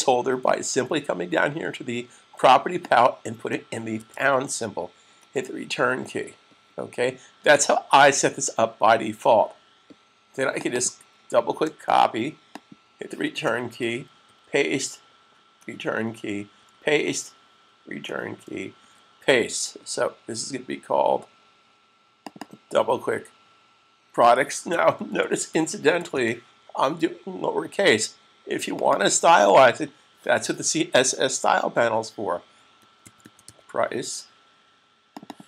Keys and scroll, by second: 3.9 typing, 11.6 super+c, 14.6 v, 23.7-25.3 typing, 26.7 typing, 32.9-33.6 typing.